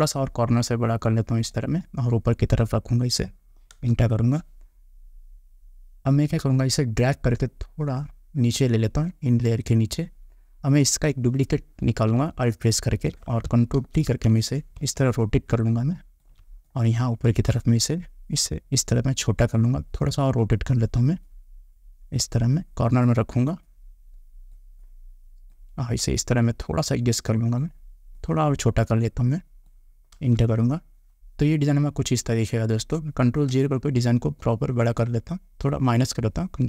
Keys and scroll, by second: 3.9 Return, 30.3 Return, 36.4 ctrl+-.